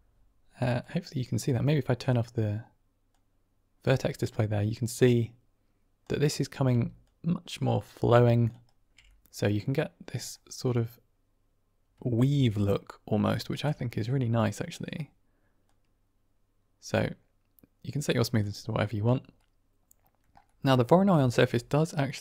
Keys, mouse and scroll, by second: 0.8-2.0 drag, 3.0-6.0 drag, 6.6 d, 6.9-8.4 drag, 8.4 d, 8.5 d, 8.5 right click, 8.5 d, 8.9-10.2 middle drag, 10.6-12.3 middle drag, 12.5-13.0 middle drag, 13.2 shift+middle drag, 13.6-14.7 middle drag, 15.5-18.3 drag, 19.3 middle click, 20.3 middle click, 21.2 ctrl+shift+click, 22.0-22.2 drag.